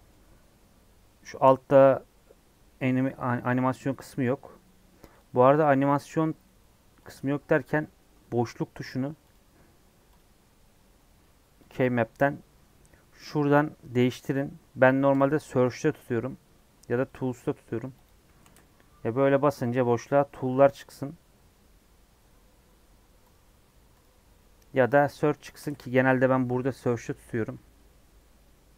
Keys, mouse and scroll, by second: 7.7-25.6 drag, 25.6 space.